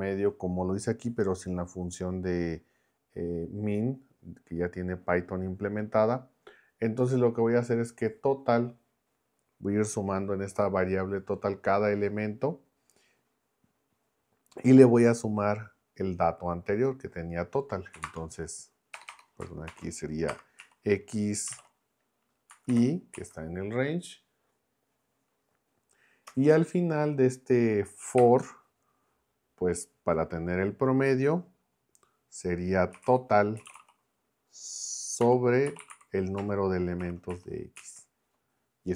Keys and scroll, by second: 17.9-21.5 typing, 22.5 Left, 22.7 i, 23.1 Right, 26.3 Return, 28.2 BackSpace, 32.7-37.3 typing, 37.8 Right.